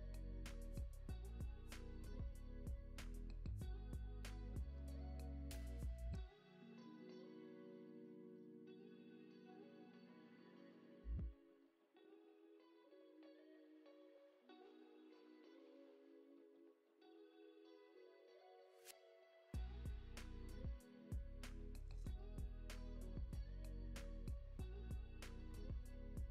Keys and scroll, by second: 0.2 space, 4.4 space, 10.8 super+c, 11.6 super+v, 12.7 super+s, 14.4 alt+x, 15.7 alt+x, 19.0 alt+q, 19.4 alt+x, 20.2 alt+x, 21.7 alt+q, 22.3 alt+x, 22.9 alt+x.